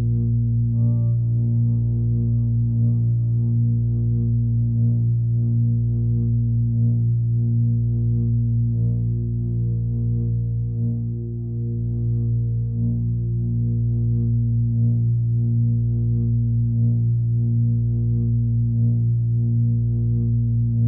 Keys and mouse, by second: 2.2-4.0 drag, 4.2-5.7 drag, 6.7-7.8 drag, 8.5 click, 10.2 click, 11.2 click, 16.2-17.4 drag, 18.0-19.6 drag, 20.6 click.